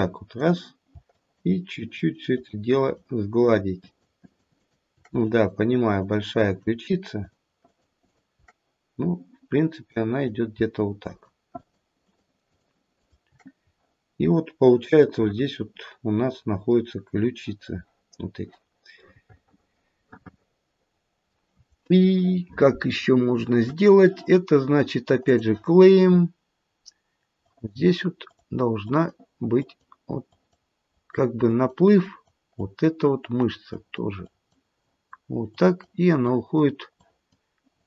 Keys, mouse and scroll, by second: 1.1 shift+click, 1.7 shift+click, 2.4 shift+click, 2.8 shift+click, 3.4 shift+click, 4.2 shift+click, 4.5 shift+click, 5.2 shift+click, 5.9 shift+click, 6.4 shift+click, 7.1 shift+click, 7.6 shift+click, 8.0 shift+click, 9.8 click, 11.0 click, 11.6 click, 12.0 shift+click, 12.5 shift+click, 13.2 shift+click, 13.5-14.2 scroll down 1, 14.2-15.1 scroll down 2, 15.1 middle click, 15.1-15.9 scroll up 1, 16.2 middle click, 16.5 middle click, 20.1 middle click, 21.0 middle click, 25.3 click, 27.4 click, 28.2 click, 28.9 click, 29.6 click, 30.3 click, 30.9 click, 31.5 click, 32.0 click, 32.5 click, 33.1 click, 33.6 click, 34.2 click, 34.8 click, 35.5 click, 36.3 click, 37.0 click, 37.7 click.